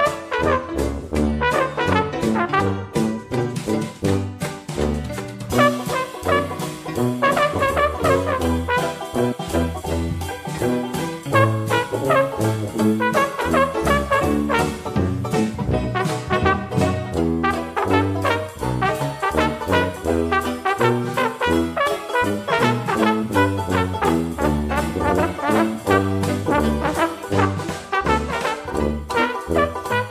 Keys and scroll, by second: 21.8 ctrl+d, 26.0 ctrl+d.